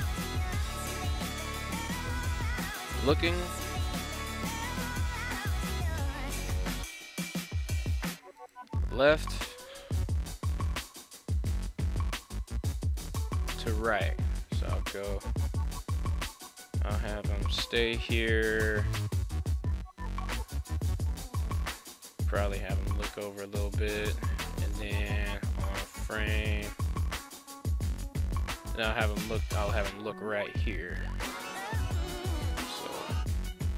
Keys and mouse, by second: 1.5 g, 2.5 click, 3.5 r, 3.6 g, 4.1-4.6 drag, 4.8 shift+middle click, 6.9 r, 7.1 r, 8.2 click, 9.4 a, 9.8 i, 14.4 Right, 14.7 Right, 15.2 Right, 15.4 Right, 15.6 Right, 16.0 Right, 17.8 Left, 18.6 i, 22.2 right click, 22.8 r, 23.0 r, 24.0 click, 25.0 Right, 25.2 Right, 25.4-25.9 Right, 26.1 Right, 27.0 Left, 27.2 Left, 27.3 Left, 27.5 Left, 27.7 Left, 32.2 r, 32.4 r.